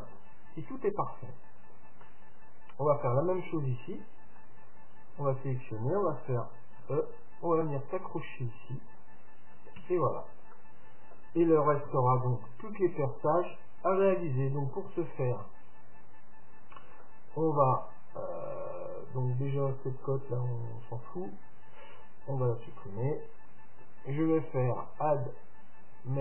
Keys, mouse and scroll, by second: 1.0-3.9 middle drag, 4.3 Tab, 5.2-7.2 right drag, 6.8 e, 9.8 Tab, 10.2-12.5 middle drag, 11.9 KP_7, 12.9-16.0 middle drag, 12.9-13.3 scroll down 1, 16.0-17.0 scroll up 1, 17.0-18.9 middle drag, 20.3-22.1 drag, 23.4-25.0 drag.